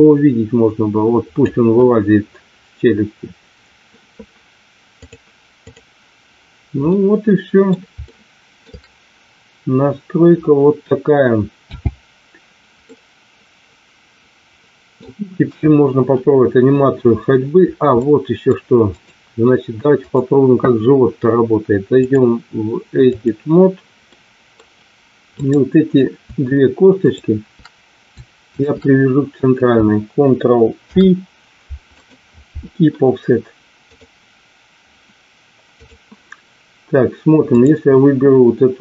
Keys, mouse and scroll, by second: 5.1 click, 6.8 middle click, 8.1 shift+middle click, 11.6 n, 12.9-15.0 middle drag, 15.4 KP_1, 18.0 middle click, 18.9 click, 22.0-23.5 drag, 24.2 middle click, 25.4 click, 28.5 shift+click, 30.8 ctrl+p, 33.8-36.1 drag, 37.5 click.